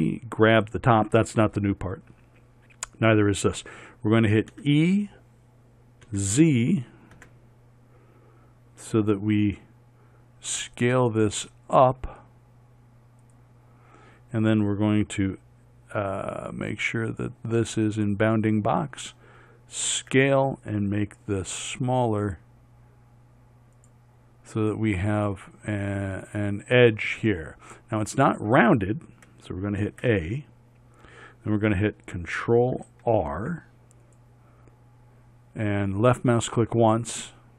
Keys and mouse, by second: 4.5 e, 18.1 click, 20.0 s, 30.0 a, 33.1 ctrl+r.